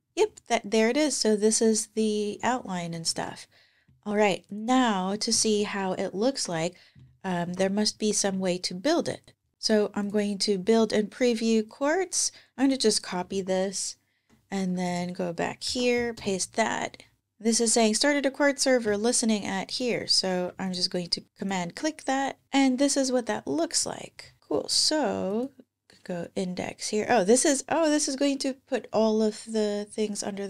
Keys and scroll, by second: 3.0 super+Tab, 5.4 super+Tab, 7.3 ctrl+Tab, 13.1 super+Tab, 15.5 super+v, 16.0 Return.